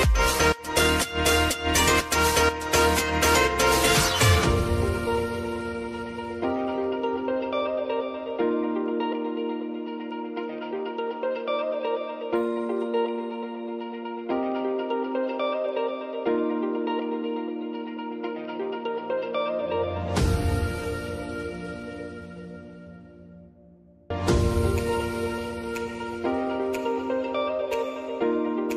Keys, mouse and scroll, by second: 0.1 click, 0.8 Return, 2.1 click, 3.2 F9, 4.2-8.2 drag, 8.2-9.9 drag, 9.9 space, 12.0 click, 14.4 p, 15.1 click, 15.5 k, 16.7 click, 17.0 j, 18.1-19.8 drag, 20.2 F9, 21.0 click, 23.1-26.3 drag, 26.6 space.